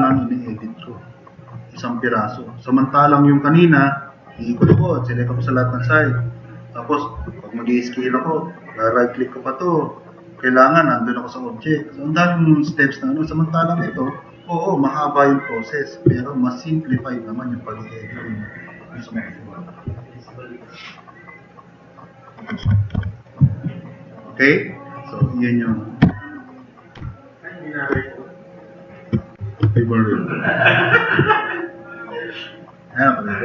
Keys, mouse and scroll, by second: 16.0 click, 16.6 drag, 20.3-20.6 drag, 21.2-22.3 drag, 22.6 4, 22.9 e, 23.1 click, 24.0 click, 25.8-26.9 typing, 27.4-28.9 drag, 29.6-30.3 typing.